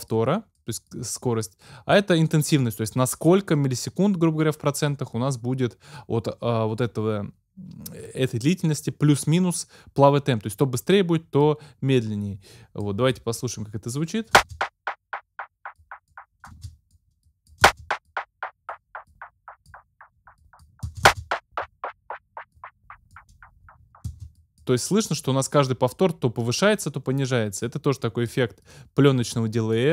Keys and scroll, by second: 14.4 space, 16.5 space, 17.7 space, 20.9 space, 24.1 space.